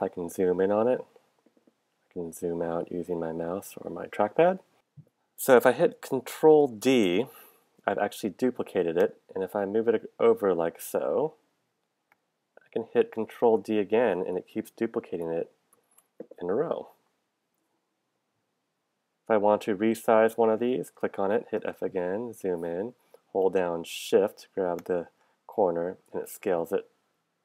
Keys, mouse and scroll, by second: 6.6 ctrl+d, 13.6 ctrl+d, 21.7 f, 24.8 shift+click, 25.6 shift+click, 26.2 shift+click, 27.3 shift+click.